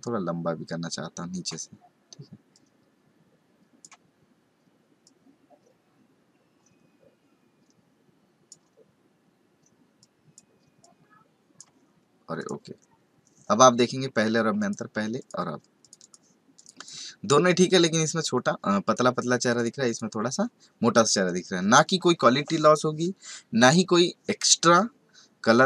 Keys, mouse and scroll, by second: 2.5 click, 5.0 click, 10.8 click, 12.3 click, 14.6 click, 15.2 click, 15.8 click, 16.0 double click, 16.5 click, 16.7 double click, 17.4 click, 18.2 click, 19.5 click, 19.8 click.